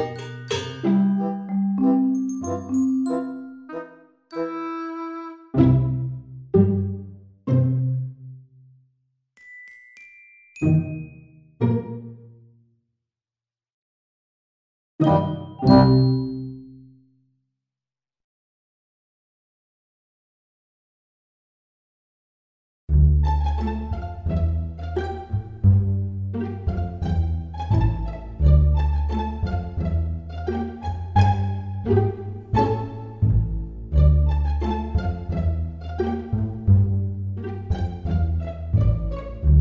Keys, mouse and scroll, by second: 4.3 super+z, 8.1 click, 8.6 click, 13.5 click, 14.5 e, 18.3 click, 19.4 middle click, 20.3-21.1 scroll down 3, 21.0 e, 28.7 e, 33.8-36.0 scroll up 4, 36.0-36.7 scroll down 3, 37.6 Tab, 38.7 click.